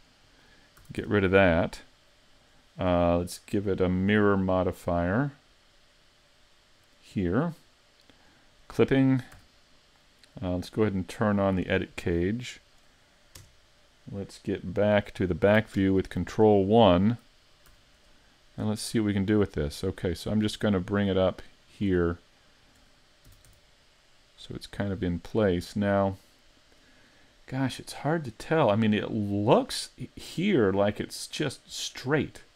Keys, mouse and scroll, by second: 0.8 a, 1.0 Tab, 1.5 middle click, 3.4 click, 8.1 click, 9.4 z, 11.7 click, 13.4 KP_3, 15.8 ctrl+KP_1, 17.4-18.1 scroll up 3, 17.7 z, 18.1 shift+middle click, 19.7 click, 22.2 shift+middle click, 23.3 s, 26.7 click, 28.0-28.5 scroll down 3, 28.3-29.9 scroll up 3.